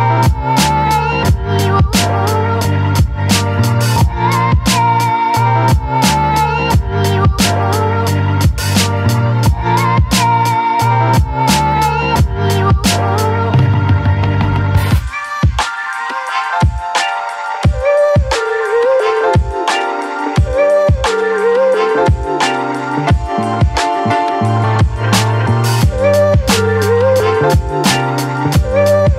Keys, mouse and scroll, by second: 0.8-2.7 typing, 3.8 Return, 5.0 shift+7, 5.7 space, 7.1 Return, 9.1 shift+d, 9.5 o, 11.3 typing, 13.9 typing, 16.9-19.6 drag, 20.0-20.8 scroll down 1, 24.2 click.